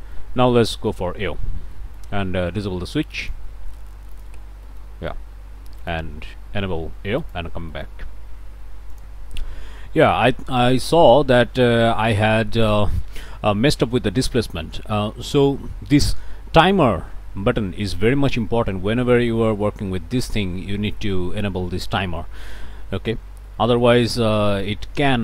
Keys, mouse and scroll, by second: 0.3-0.7 scroll down 2, 0.7 middle click, 1.7 middle click, 3.2 click, 4.1 ctrl+shift+click, 4.5 ctrl+shift+click, 5.8 click, 7.2 click, 7.7 click, 9.0 click, 11.1-12.1 drag, 12.2 scroll up 1, 13.6 scroll down 1, 19.2-19.5 scroll up 1, 23.5 click, 25.0 click.